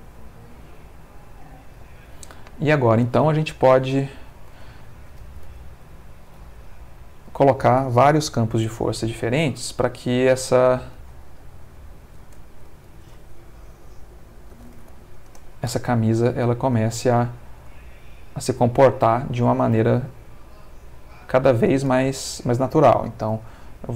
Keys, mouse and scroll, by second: 1.3 Escape, 2.3 middle click, 4.1 click, 4.7 ctrl+middle click, 5.4 ctrl+r, 6.3 click, 6.3 g, 7.3 click, 8.6 shift+d, 9.5 click, 9.6 r, 10.7 click, 12.8 ctrl+click, 14.5 5, 14.7 0, 15.3 Return, 16.1 middle click, 16.8 space, 19.0 middle click, 21.1 click, 23.3 shift+d.